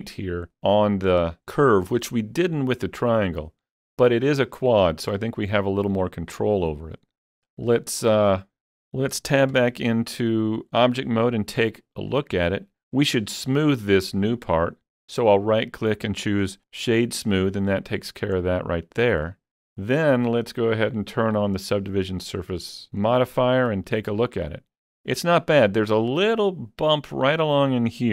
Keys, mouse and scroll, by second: 3.5-7.4 middle drag, 3.5-5.3 scroll down 1, 7.3 scroll down 1, 7.4-8.5 shift+middle drag, 8.8 shift+middle click, 8.8 scroll down 1, 8.9-9.5 scroll down 1, 9.5 Tab, 11.0-16.4 middle drag, 12.1-13.9 scroll up 1, 14.5 right click, 16.4 click, 18.4-27.9 middle drag, 21.1 click.